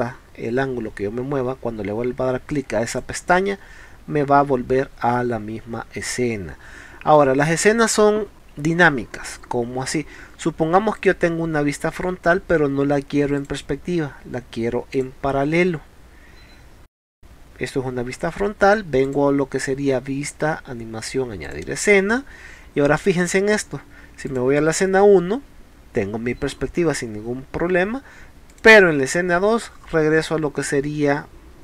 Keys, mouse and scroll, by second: 2.9 click, 11.0 click, 13.4 click, 15.0 click, 15.8 middle click, 16.2 middle click, 16.5 middle click, 19.1 click, 21.5 click, 24.3 click, 28.5 click.